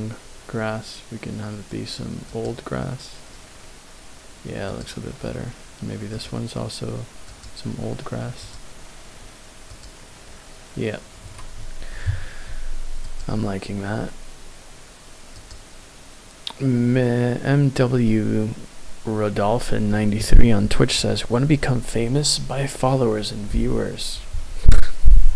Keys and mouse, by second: 4.6 click, 6.1-7.7 drag.